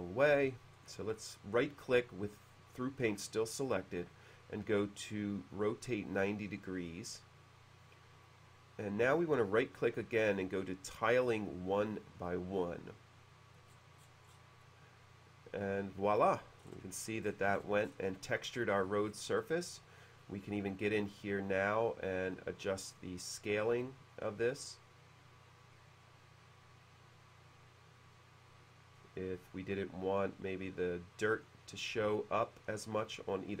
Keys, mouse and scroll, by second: 0.4 b, 0.8 right click, 5.7-6.9 drag, 9.1 right click, 12.3 click, 13.6 middle click, 13.7-14.6 scroll down 1, 14.6-16.2 middle drag, 16.6 middle click, 17.5-18.2 scroll up 2, 18.5-19.2 scroll down 1, 19.5 middle click, 20.3 click, 21.7-23.0 drag, 24.7-29.0 drag, 30.2-31.4 drag.